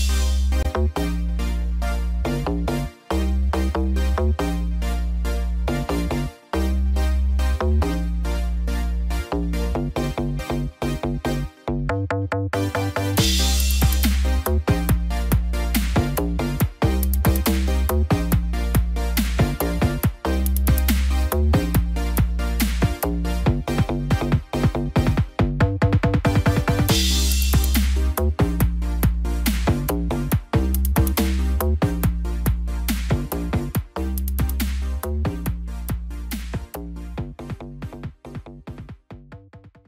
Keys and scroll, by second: 14.2 ctrl+0.